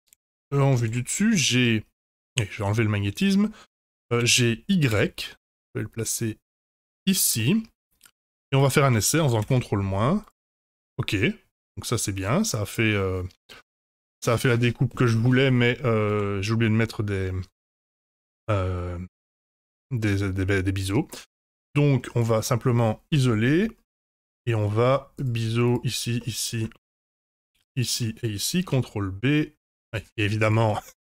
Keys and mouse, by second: 0.8 KP_7, 1.3 g, 3.1 click, 4.1 g, 7.3-8.1 middle drag, 10.0 ctrl+KP_Subtract, 10.2 click, 10.6-14.2 middle drag, 15.4 ctrl+z, 16.3 ctrl+z, 16.8-19.1 middle drag, 20.5 middle drag, 23.0 KP_Divide, 24.0 Tab, 24.8 2, 26.1 middle click, 27.7 shift+click, 28.6 ctrl+b, 29.8 ctrl+click, 30.6 ctrl+z, 30.9 ctrl+z.